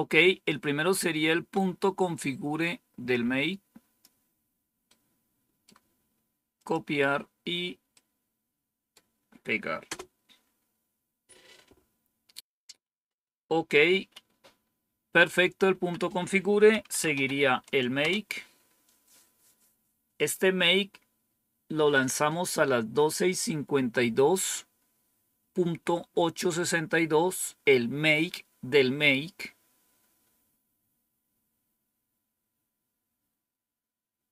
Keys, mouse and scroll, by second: 2.1-4.0 drag, 4.8 right click, 6.5 click, 7.9-8.9 right drag, 9.8 Return, 13.0 click, 13.8 Up, 15.6 Down, 16.4-17.5 typing, 17.9 Return.